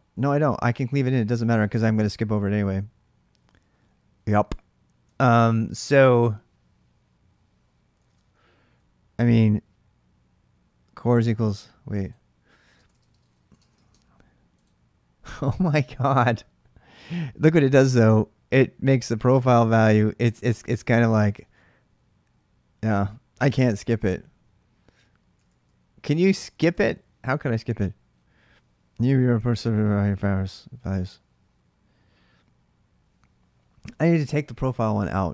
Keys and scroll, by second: 4.9 ctrl+[, 5.0-5.6 h, 7.8 alt+Tab, 12.4-14.2 typing, 25.1 alt+Tab, 29.2 ctrl+[, 29.3 h, 29.5 h.